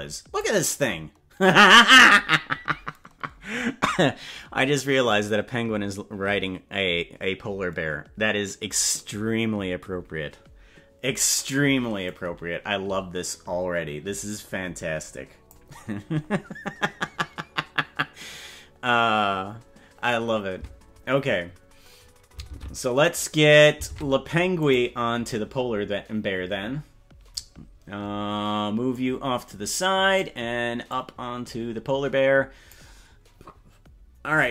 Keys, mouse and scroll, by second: 12.0-13.5 drag, 13.7-15.5 drag, 22.5 ctrl+Tab, 23.9 ctrl+Tab, 24.9 right click, 28.9 click, 29.7 click, 30.8-32.7 drag.